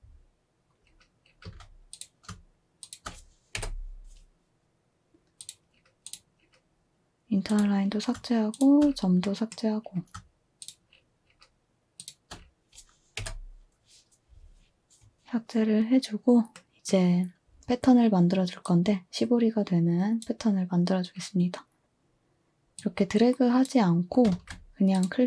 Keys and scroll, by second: 1.4 z, 3.5 Delete, 13.2 Delete, 24.3 ctrl+z.